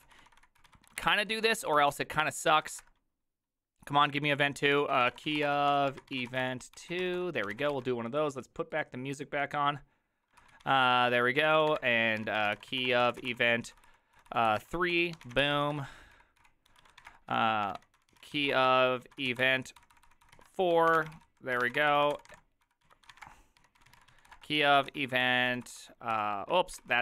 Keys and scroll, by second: 0.0-3.0 typing, 4.5-8.2 typing, 10.2-27.0 typing, 14.6 ctrl+n, 14.6 ctrl+y, 26.2 ctrl+y.